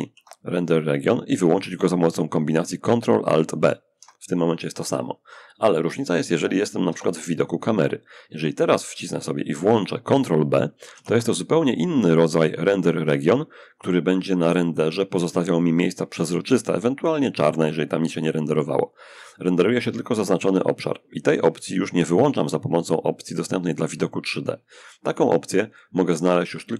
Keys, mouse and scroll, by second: 2.7 ctrl+alt+b, 6.1 0, 7.4-8.1 scroll up 1, 8.1 shift+scroll up 1, 8.4-9.4 shift+drag, 10.1 ctrl+b, 10.8-12.7 ctrl+drag.